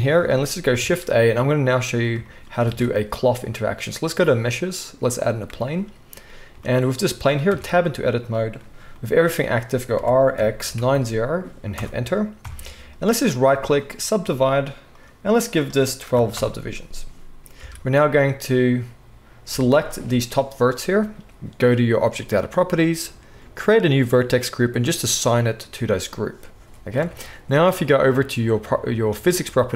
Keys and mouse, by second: 0.8 shift+a, 2.7 shift+a, 6.7-13.3 middle drag, 7.5 Tab, 9.9 r, 12.4 KP_1, 13.3-15.0 drag, 14.9 middle click, 14.9 right click, 17.6 alt+a, 19.8-22.0 alt+shift+drag, 22.0 middle click, 22.1-23.5 drag, 23.5-28.7 middle drag, 27.0 Tab, 28.7-29.7 drag.